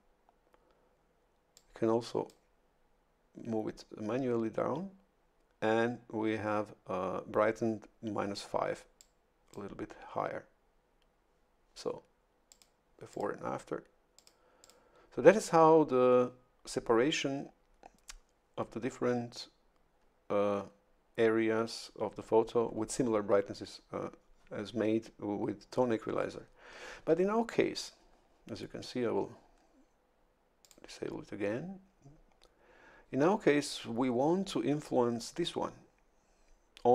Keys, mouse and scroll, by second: 1.5 click, 9.0 click, 12.5 click, 13.1 click, 14.2 click, 14.6 click, 30.6 click.